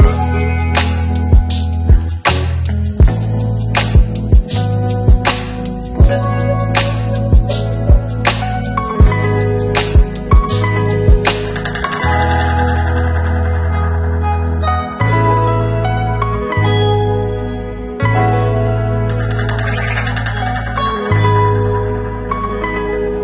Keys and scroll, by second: 18.5 ctrl+shift+q.